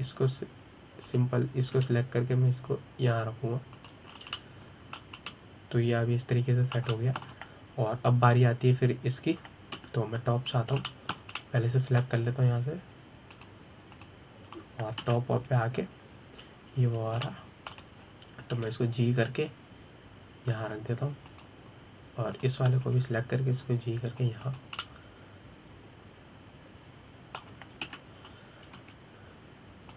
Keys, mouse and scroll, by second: 1.4 click, 2.7 click, 3.4 g, 5.8 scroll down 2, 6.0-11.4 middle drag, 11.4 KP_7, 12.2-12.5 scroll up 2, 12.5-15.0 shift+middle drag, 15.0 click, 15.6 click, 16.7 KP_7, 18.9-20.2 shift+middle drag, 20.2 g, 23.1 click, 24.0 click, 24.6 g, 26.5-29.5 middle drag, 29.5 KP_7.